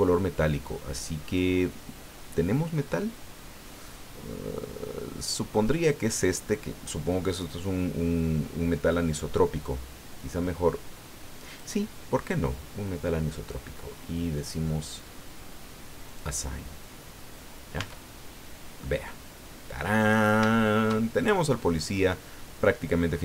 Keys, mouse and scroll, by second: 0.7-1.4 scroll down 4, 2.5-3.0 scroll down 2, 3.2-3.5 scroll down 1, 11.4 click, 16.0 click, 17.8 Tab, 18.4-18.8 scroll down 2, 18.8-20.0 drag, 20.0 scroll down 2, 20.5 shift+click, 21.1-22.4 shift+scroll down 7.